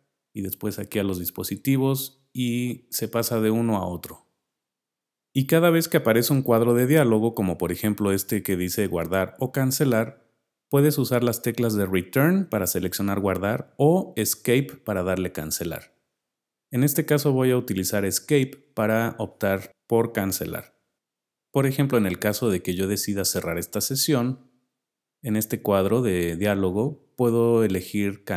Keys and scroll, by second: 1.4 Tab.